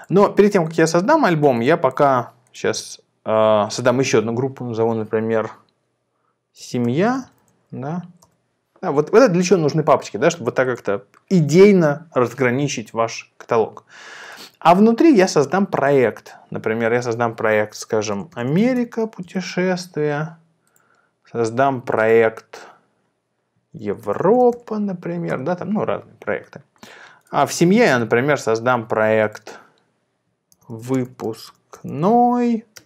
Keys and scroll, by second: 6.4-7.8 typing, 8.3 Return, 17.8-19.3 typing, 23.6-24.9 typing, 25.2 Return, 30.3-32.8 typing.